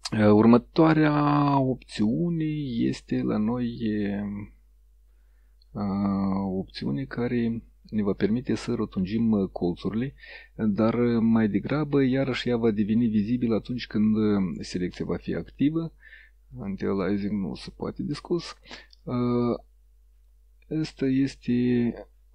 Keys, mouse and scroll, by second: 8.1 click, 9.9-14.6 drag, 15.1 click, 16.6 click, 17.2 click, 19.1-20.5 drag, 21.4-22.2 drag.